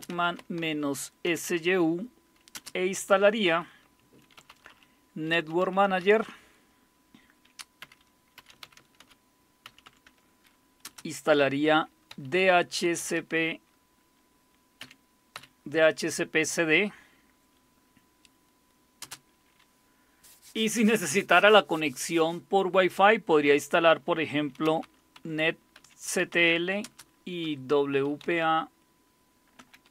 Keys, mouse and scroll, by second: 0.0-2.5 typing, 4.1-6.5 typing, 7.8-10.8 typing, 11.9-13.6 typing, 14.8-15.3 typing, 19.0 space, 24.4-29.9 typing.